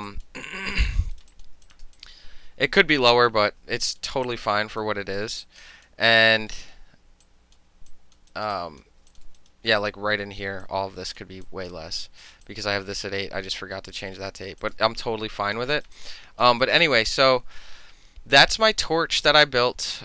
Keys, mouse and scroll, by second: 0.1 alt+click, 0.8 alt+click, 1.2 alt+right click, 1.4 alt+click, 1.7 alt+click, 1.9 alt+middle click, 2.0-3.4 alt+drag, 3.4-3.9 alt+middle drag, 3.9 alt+click, 4.1 alt+middle drag, 4.3 alt+click, 4.4 alt+middle click, 4.9 alt+right click, 5.2 alt+middle click, 5.5 alt+click, 5.9 alt+middle drag, 6.2 alt+right click, 6.4 alt+middle drag, 6.8 alt+middle click, 7.3 alt+click, 7.6 alt+middle click, 8.0 alt+click, 8.2 alt+middle click, 8.4 alt+right click, 8.5 alt+middle click, 8.6 alt+click, 8.9 alt+middle click, 9.2 alt+click, 9.3 alt+middle click, 9.5 alt+right click, 9.6 alt+middle click, 9.9 click, 10.7 alt+click, 11.5 alt+click, 12.3 alt+right click, 12.5 alt+click, 14.2 alt+middle click, 14.7 click, 15.1 alt+click, 15.8 alt+right click, 15.9 alt+middle click, 16.0 alt+click, 16.5 alt+middle click, 16.7 alt+right click, 16.8 alt+middle click, 16.9-20.0 alt+drag.